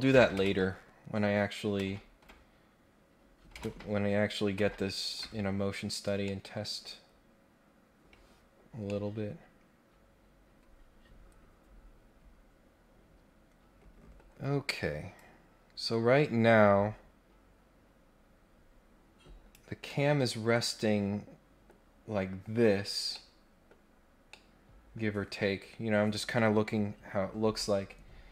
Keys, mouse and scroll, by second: 0.4 ctrl+Tab, 1.8 ctrl+Tab, 3.6 ctrl+Tab, 4.5 ctrl+Tab, 6.2 middle click, 6.7 scroll up 1, 6.8-7.2 scroll down 2, 8.9-14.1 middle drag, 15.1-19.5 drag, 19.8-21.6 middle drag, 22.4 scroll down 1, 22.7 scroll up 1, 23.1 middle click, 24.3 middle click, 25.0 scroll down 1, 28.0-28.3 scroll up 2.